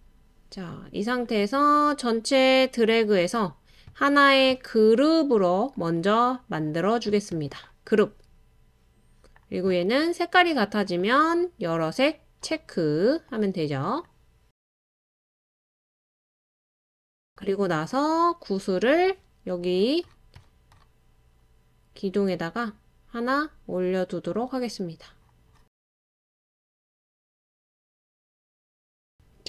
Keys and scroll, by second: 15.2 typing, 18.1 typing, 25.4 typing.